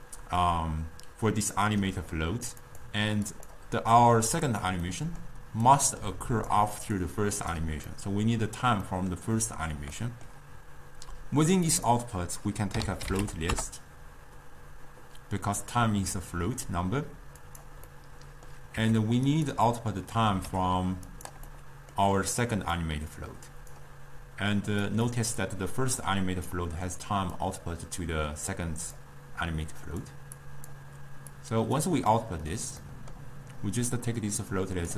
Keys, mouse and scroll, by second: 1.6-2.7 middle drag, 2.7 click, 3.4 click, 4.5 click, 4.9 middle click, 5.7 click, 7.0 click, 7.9-11.7 middle drag, 11.7-16.8 drag, 18.0 middle click, 18.9 g, 19.7 middle click, 20.5 g, 21.5-22.9 middle drag, 22.9 drag, 24.9 click, 25.5-30.1 drag, 30.5-31.5 drag, 32.1-34.2 middle drag, 34.2 click.